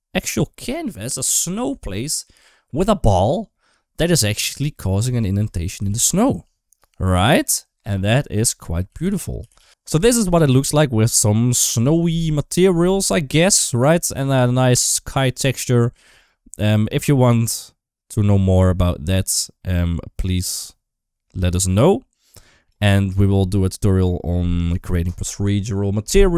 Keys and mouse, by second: 4.3 middle click, 5.0 shift+middle click, 5.3 middle click, 5.8 ctrl+s, 15.1-22.5 drag.